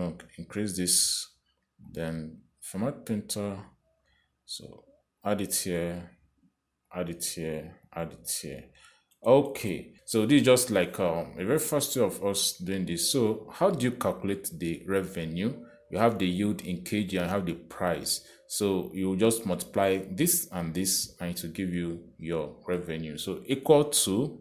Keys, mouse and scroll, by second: 1.0 click, 3.1 click, 4.6 click, 6.5 click, 8.2 click, 9.1 click, 10.0 click, 10.8 click, 13.8 click, 21.3 click, 22.0 click, 23.7 click.